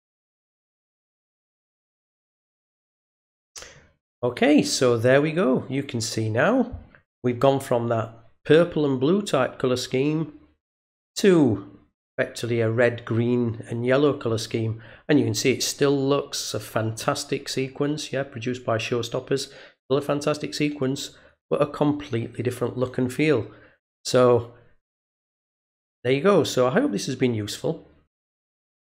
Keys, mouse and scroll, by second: 2.3 click.